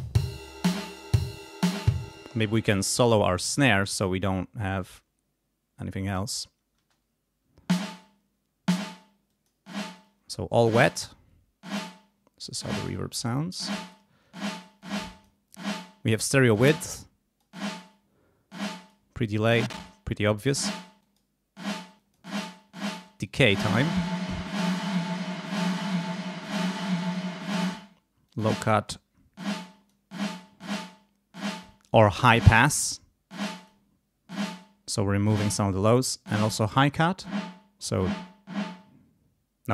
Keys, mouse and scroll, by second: 0.5 scroll up 1, 1.1-1.8 scroll up 1, 2.0 space, 2.6 scroll up 1, 3.2 scroll up 1, 4.8 scroll up 2, 5.8 scroll up 2, 6.8 space, 9.3 click, 10.0 click, 11.8 click, 12.8 click, 13.6 click, 14.8 click, 16.8 click, 18.6 click, 19.6 click, 21.0 click, 22.0 click, 23.2 click, 25.2 click, 27.4 click, 28.3 click, 29.6 click, 30.3 click, 33.5 click, 36.4-37.4 drag.